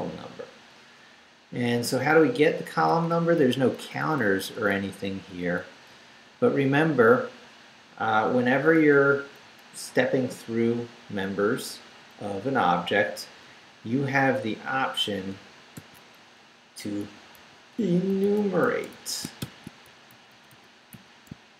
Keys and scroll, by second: 0.8 Up, 2.4 Down, 5.9 Left, 8.5 Right, 13.4 Right, 15.7 i, 17.0-19.9 typing, 20.1 shift+Right, 21.3 shift+Right.